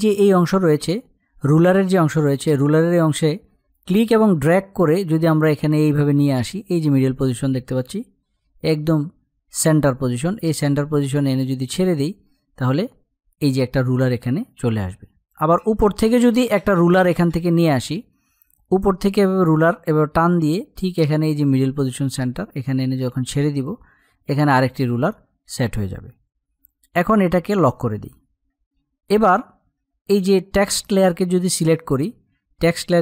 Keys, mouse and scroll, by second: 3.4-13.4 drag, 18.8-26.4 drag, 27.2 click, 30.7 click.